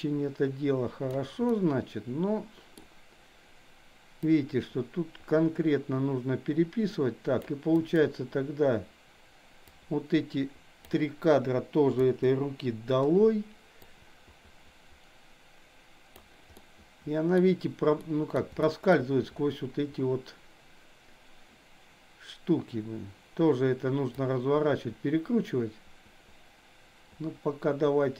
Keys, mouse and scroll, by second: 1.5-2.8 middle drag, 4.3-7.4 drag, 7.7 click, 9.9-10.9 drag, 11.9 Delete, 13.9-16.3 drag, 16.5-17.3 middle drag, 18.0 middle click, 18.7 shift+middle click, 24.3-28.1 drag.